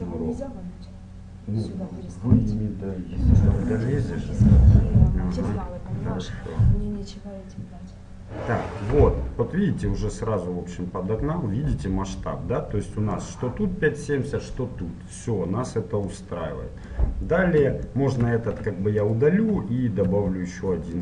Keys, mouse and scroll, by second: 16.1-17.9 drag, 17.9-19.9 middle drag, 18.5 x, 20.1 shift+a.